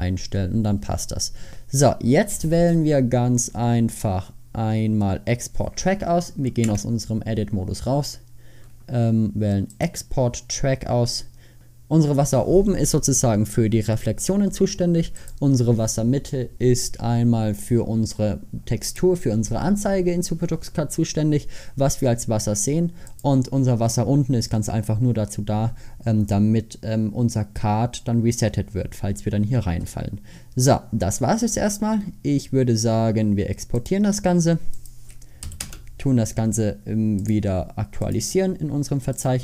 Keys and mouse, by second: 1.0-6.1 drag, 6.1 middle click, 6.7 Tab, 11.2 click.